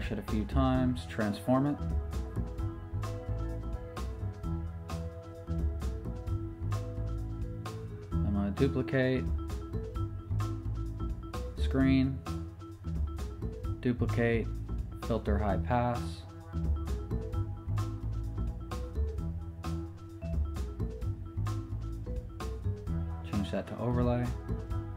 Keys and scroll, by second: 2.7 super+t, 7.3 Return, 11.4 super+j, 16.0 super+j.